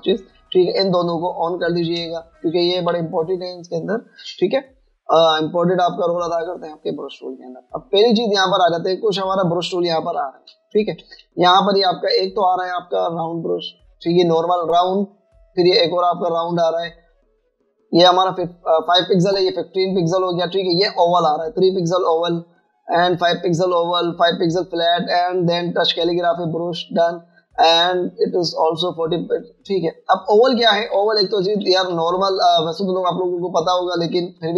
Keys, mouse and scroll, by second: 4.0 v, 32.9 v, 33.8 v, 34.0 ctrl+scroll up 1.